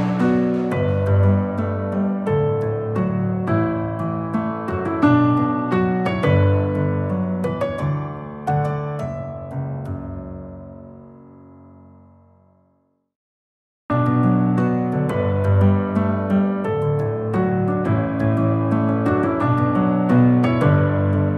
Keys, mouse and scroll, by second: 10.2-14.1 drag, 14.9-18.0 drag, 18.9 click, 19.6-21.3 drag.